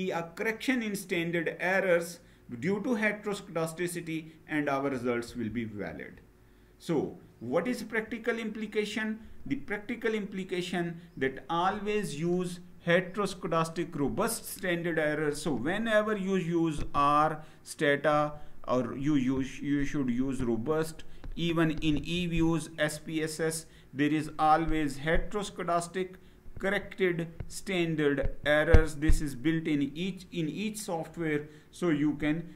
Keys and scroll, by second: 5.1 Down.